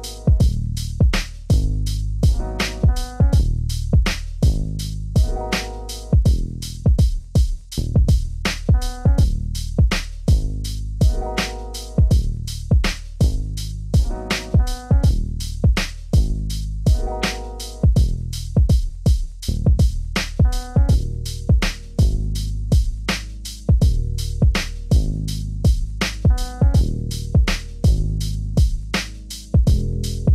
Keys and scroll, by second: 3.4 ctrl+g.